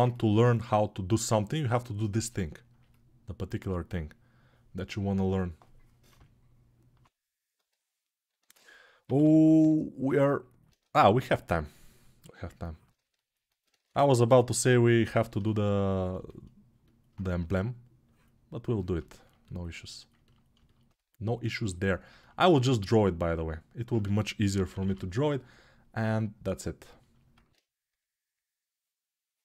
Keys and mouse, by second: 1.6-10.0 right drag, 6.6 [, 7.4 ctrl+[, 10.0-16.9 alt+drag, 13.6 ctrl+z, 16.9-20.8 ctrl+right drag, 20.8-29.4 alt+drag, 27.3 alt+q.